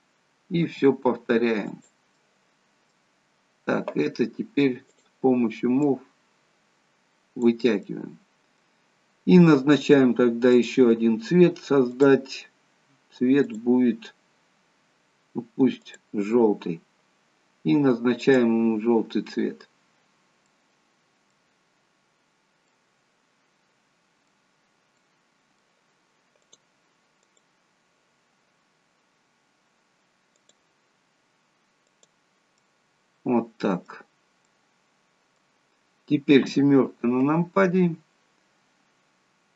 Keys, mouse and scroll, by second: 0.8 i, 2.3 middle click, 3.4-4.5 scroll down 1, 5.0 click, 6.4 click, 7.9 middle click, 10.7 click, 19.1 click, 20.3 scroll up 1, 20.6 middle click, 22.9 middle click, 26.6 middle click, 26.6 click, 28.0 click, 32.8 middle click, 34.2 scroll down 2, 34.6 middle click, 36.5 KP_7.